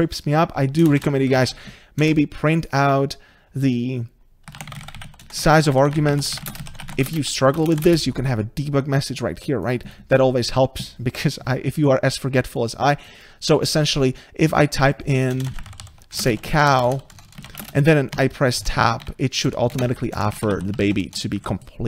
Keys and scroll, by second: 2.1 Return, 18.2 Tab, 21.2 Tab.